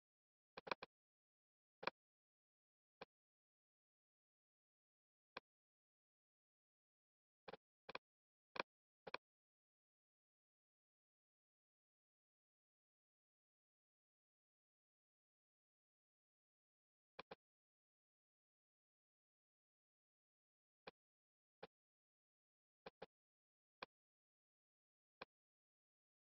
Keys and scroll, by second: 21.9 super+z.